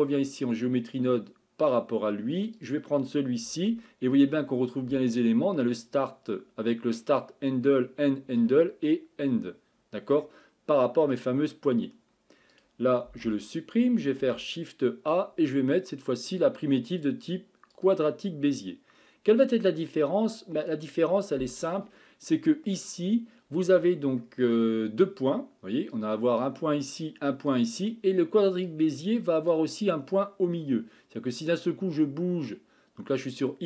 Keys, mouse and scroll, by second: 1.7 click, 2.6-12.6 drag, 13.3 x, 19.4-20.7 drag, 22.0-23.0 middle drag, 23.0-24.2 scroll up 2, 24.2-24.6 shift+middle drag, 24.6-26.4 scroll up 1, 26.4 click, 27.5 click, 33.3-33.6 drag.